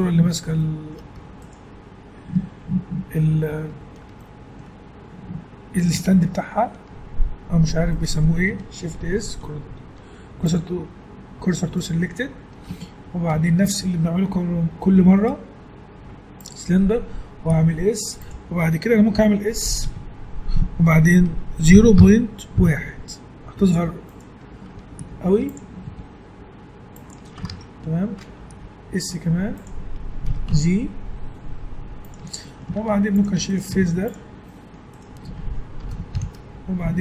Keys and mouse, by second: 3.0-10.4 middle drag, 9.0 shift+s, 11.7 middle click, 13.3 shift+a, 17.5 s, 19.8 s, 25.0 s, 25.8 s, 27.5 ctrl+Tab, 28.5 s, 30.2 s, 32.5 middle click, 32.7 ctrl+Tab, 33.5 right click, 33.7 x, 35.8 ctrl+l, 36.1 shift+h.